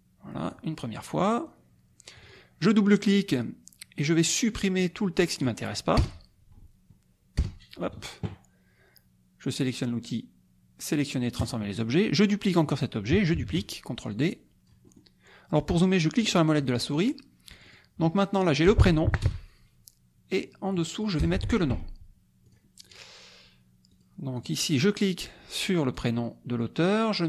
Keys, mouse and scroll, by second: 1.0 click, 2.1 click, 4.8 click, 6.0 BackSpace, 7.4 BackSpace, 11.4 click, 13.3 ctrl+d, 14.1 click, 16.4 click, 17.6 click, 18.4 click, 19.2 BackSpace, 20.6 click, 21.2 BackSpace, 22.5 click, 23.9 click, 24.4 click, 26.0-27.2 drag.